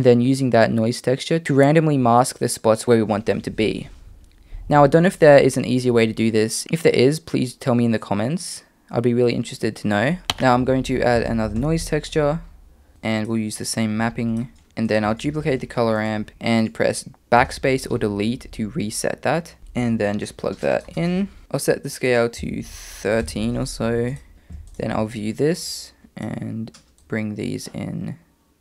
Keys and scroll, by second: 10.2-10.7 typing, 15.3 shift+d, 17.4 BackSpace.